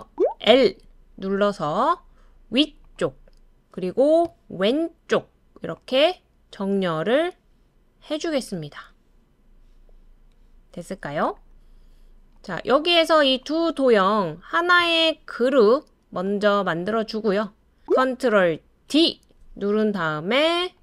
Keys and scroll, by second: 0.1-0.5 typing, 7.3-8.1 typing, 10.3-10.9 typing, 12.9 typing, 17.8 ctrl+d, 18.9 super+d.